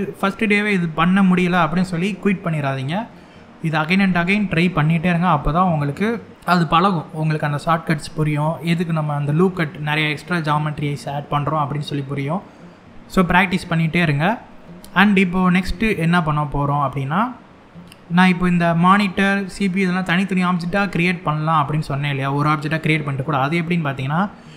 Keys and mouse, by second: 2.8 shift+middle click, 21.9 shift+middle click.